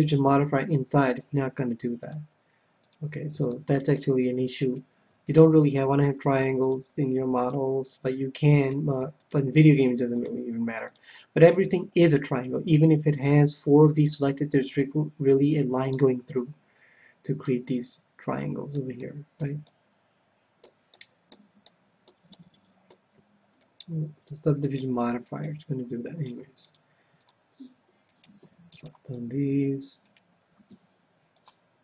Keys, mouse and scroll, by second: 2.0-3.8 drag, 3.4-5.3 middle drag, 4.5-7.0 right drag, 6.6-8.3 drag, 8.6-11.1 right drag, 10.1-11.8 drag, 17.4-24.1 middle drag, 23.5-26.9 right drag, 26.6-28.2 drag, 28.0-31.8 right drag, 31.3-31.8 drag.